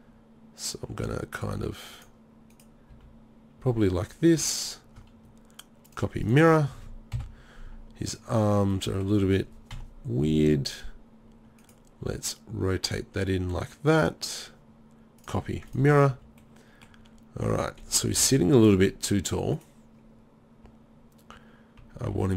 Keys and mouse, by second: 2.1 drag, 2.9 r, 7.2 KP_7, 9.7 KP_1, 12.1 r, 16.1 z, 17.0 z, 18.2 KP_3, 21.8 g.